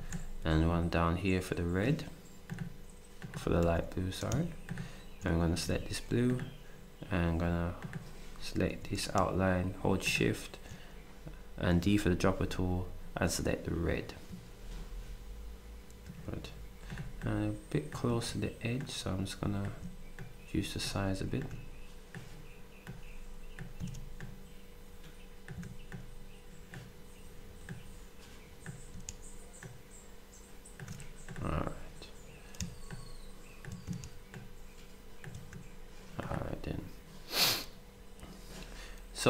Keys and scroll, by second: 3.6 d, 5.6 s, 8.6 d, 11.8 s.